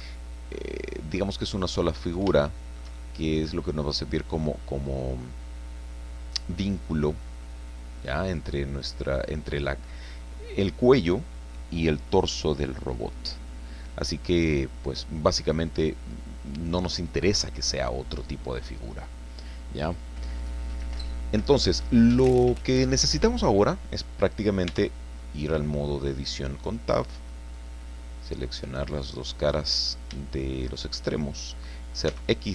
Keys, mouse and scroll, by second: 0.0-1.3 middle drag, 1.3 click, 1.4 scroll up 1, 1.6-3.6 middle drag, 7.2 scroll down 2, 14.7-15.2 scroll down 2, 15.4-16.1 scroll up 4, 24.7 Tab, 25.2-26.2 middle drag, 27.5 click, 28.6 right click, 29.0-30.1 middle drag, 30.1 shift+click, 30.9 shift+right click, 32.1 x.